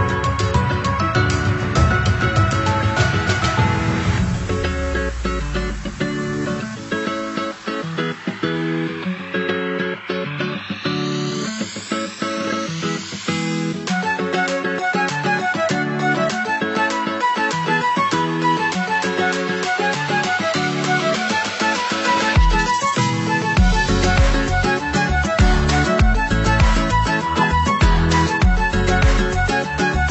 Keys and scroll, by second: 0.6 BackSpace, 2.3 a.